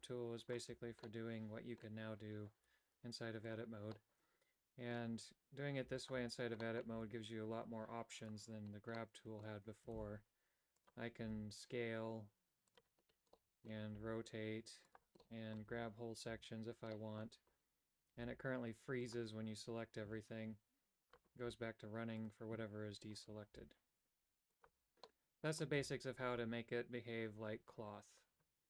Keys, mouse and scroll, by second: 0.5 alt+right click, 1.2 middle click, 2.7 g, 4.0-5.1 middle drag, 6.8 middle click, 7.1 g, 9.1 middle click, 10.1 shift+s, 11.3 s, 13.5 middle click, 14.1 r, 15.3 middle click, 15.8 a, 16.4 a, 17.0 middle click, 18.3 g, 20.2 a, 21.2 right click, 21.6 g, 23.6 g, 25.2 middle click, 25.9 a.